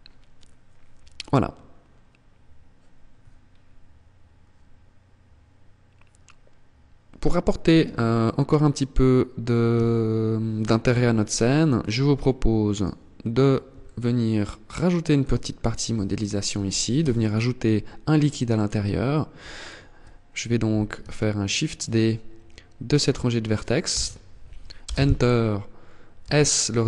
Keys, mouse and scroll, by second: 0.4 scroll down 4, 2.3 scroll down 3, 9.0 KP_1, 10.9 click, 11.8-12.8 scroll down 5, 13.1 shift+middle click, 14.6-15.0 scroll up 2, 15.4 shift+middle click, 16.3 Tab, 18.8 alt+right click, 23.2 shift+d, 25.4 s.